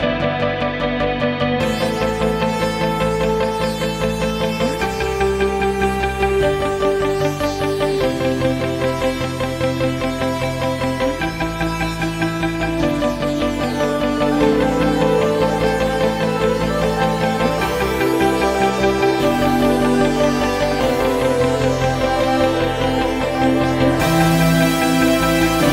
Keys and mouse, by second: 7.5-12.0 drag, 13.4-16.9 ctrl+middle drag, 16.9 click, 19.7 shift+d.